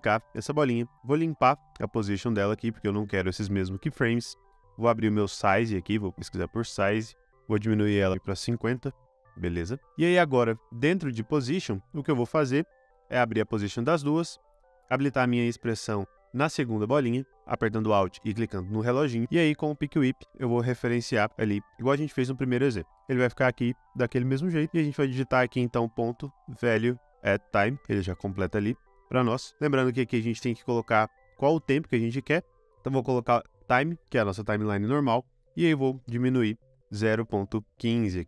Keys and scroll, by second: 0.0 super+d, 1.0 p, 6.1-9.0 typing, 10.6 p, 12.9 p, 25.5-27.5 typing, 28.1 Return, 35.7-37.9 typing.